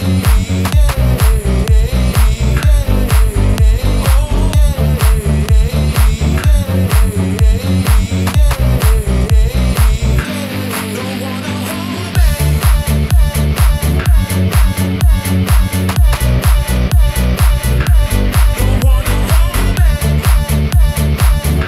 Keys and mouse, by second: 0.9 s, 4.3-5.6 middle drag, 5.8 middle click, 6.5 shift+middle click, 7.2 middle click, 7.8 shift+middle click, 8.6-10.7 middle drag.